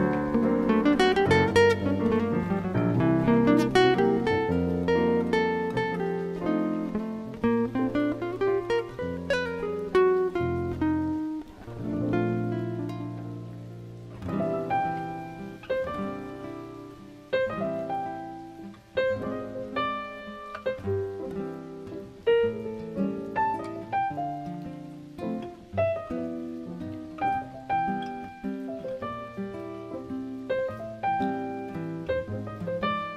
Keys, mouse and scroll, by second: 2.5 Tab, 5.4 alt+right click, 8.1 click, 11.3 click, 15.4 click, 20.6 click, 22.4 middle click, 26.7 click.